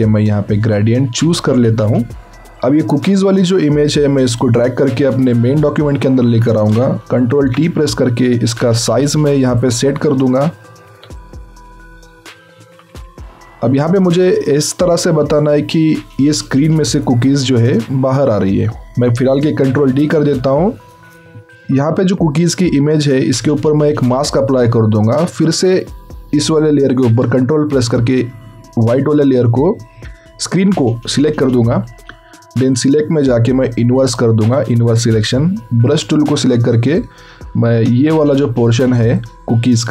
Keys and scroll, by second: 7.1 ctrl+t, 20.0 ctrl+d.